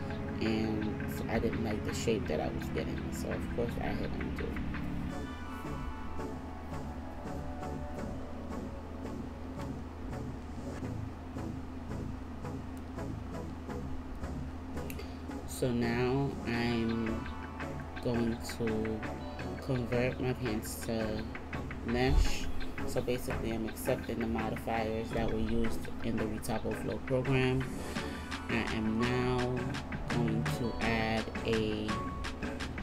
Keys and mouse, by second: 16.0 Tab, 19.1 w, 22.6 w, 26.1 Tab.